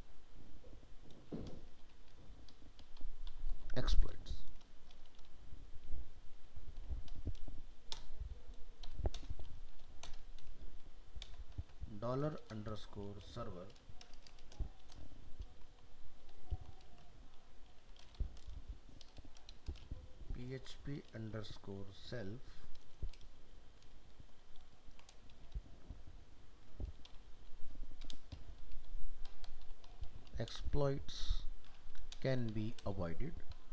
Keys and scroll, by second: 23.9 ctrl+shift+Left.